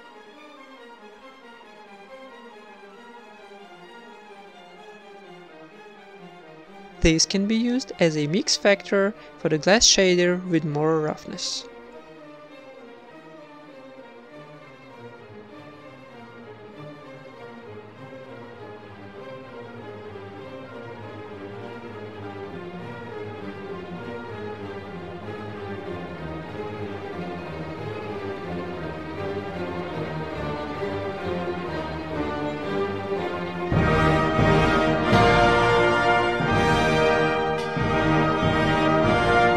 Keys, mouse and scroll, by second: 0.1 click, 0.6 click, 1.2 click, 1.9 click, 2.3 click, 3.1 click, 3.3 click, 4.1-8.2 middle drag, 8.2-9.8 drag, 8.2 shift+d, 10.1-13.4 drag, 14.8-16.3 drag, 14.8 shift+d, 16.4 click, 17.4-18.9 middle drag, 18.9 click, 20.7-21.7 middle drag, 21.7 click, 23.7 click, 24.8 click, 28.1 right click, 28.1 g, 28.4-29.5 drag, 28.4 ctrl+s, 33.3 click, 33.3 shift+d, 34.6 click, 35.5 click, 35.9 click, 39.4 ctrl+s.